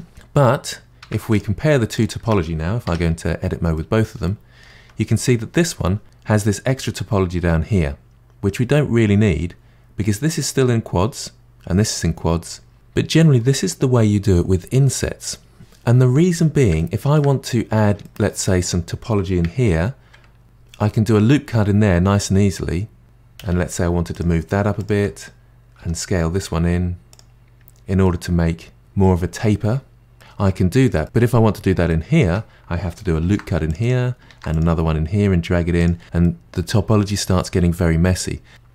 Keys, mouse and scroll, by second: 1.0 Tab, 1.3 drag, 1.9 shift+click, 2.8 Tab, 3.7-8.1 middle drag, 16.8 middle click, 17.4-18.0 scroll up 3, 18.0-20.4 middle drag, 20.4 ctrl+r, 23.0 alt+click, 23.4 g, 24.8 alt+click, 25.8 s, 27.5-28.0 scroll down 2, 28.0-30.1 middle drag, 30.1-30.6 scroll up 4, 30.6-31.0 scroll down 1, 31.0-31.9 scroll up 3, 31.9-33.2 middle drag, 33.2 ctrl+r, 34.3 ctrl+r, 36.2-38.7 middle drag.